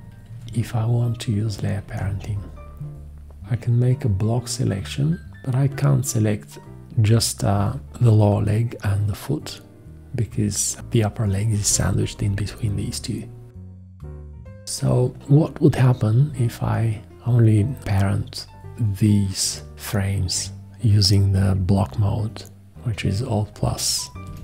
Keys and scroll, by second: 0.2 shift+x, 1.8 shift+x, 24.2 alt+;.